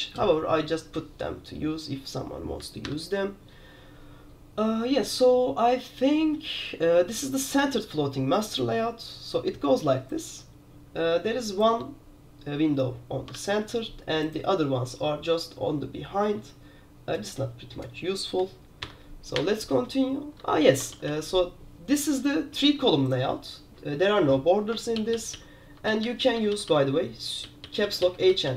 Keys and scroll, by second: 3.0 alt+8, 13.5 super+q, 19.0 alt+8, 19.5 alt+9, 21.0 super+g, 21.2 super+g, 25.2 super+l, 25.2 super+l, 25.7 super+h, 26.0 super+h, 26.3 super+h, 26.4 super+h, 26.6 super+h, 26.8 super+h, 27.6 super+l, 27.8 super+l, 28.1 super+l, 28.4 super+h.